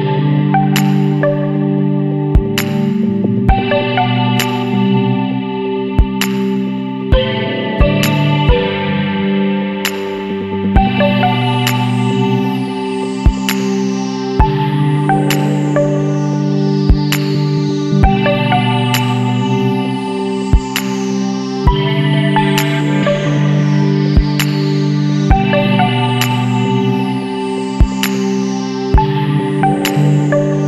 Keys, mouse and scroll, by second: 2.3 middle click, 2.5 click, 3.9 scroll down 1, 4.4 scroll up 2, 5.2-6.7 middle drag, 5.4-6.7 drag, 9.2 click, 11.0 click, 12.1 click, 13.1 KP_1, 13.6 KP_Decimal, 13.9 KP_5, 16.9 click, 21.3 click, 24.2 click, 25.8 click, 27.0 KP_9, 28.6 click, 29.9-30.6 scroll up 5.